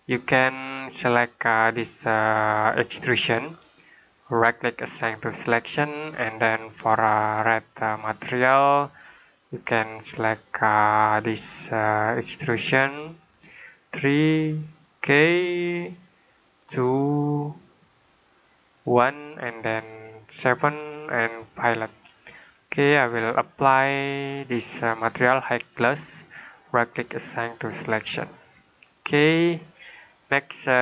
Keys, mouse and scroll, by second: 2.9 click, 4.2 right click, 5.2 click, 12.8 click, 16.3 click, 18.7 click, 24.0 click, 25.7 right click, 27.4 click, 30.7 scroll down 1.